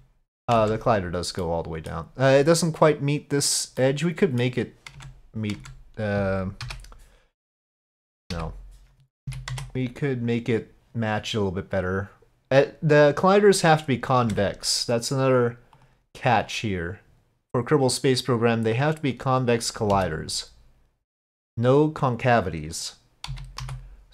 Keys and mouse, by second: 0.6 Tab, 1.4-1.9 middle drag, 3.8-4.5 drag, 5.0 Tab, 5.6 Tab, 9.3 z, 14.3 Tab, 15.8 click, 16.5-19.6 drag, 19.9 s, 23.3 z.